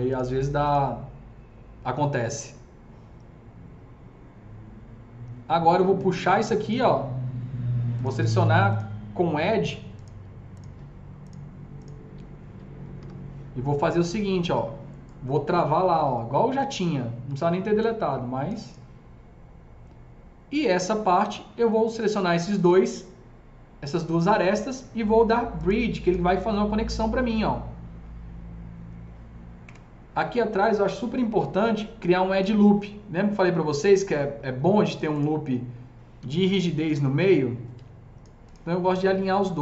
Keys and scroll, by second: 0.1 Delete, 12.8 w, 17.6 shift+s, 29.5 KP_0, 36.7 s.